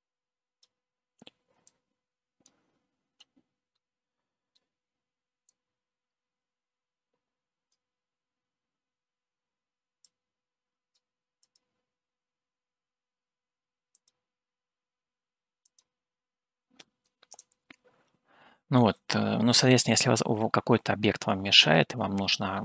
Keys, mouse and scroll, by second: 2.1 click, 4.2 middle click, 5.6-8.2 drag, 10.4-11.4 drag, 11.6 click, 19.3-22.1 middle drag.